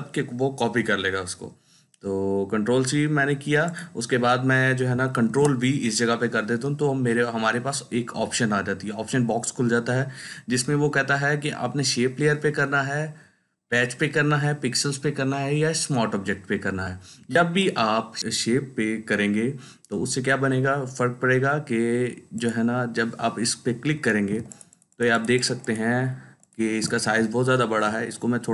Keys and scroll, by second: 5.1 ctrl+v, 27.4 ctrl+t.